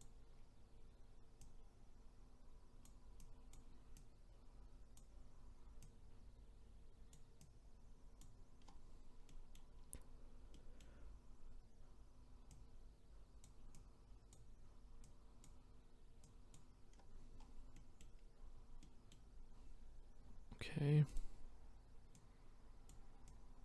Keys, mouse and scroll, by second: 8.6-9.3 scroll down 4, 9.3-9.8 middle drag, 9.8-10.5 scroll up 2, 10.5-10.9 middle drag, 10.9-12.5 scroll up 5, 12.5-16.9 drag, 16.9-17.7 scroll down 9, 17.7-18.2 middle drag, 18.2-18.8 scroll up 7, 18.8 middle click, 19.4-21.1 scroll up 2, 21.1-23.6 drag.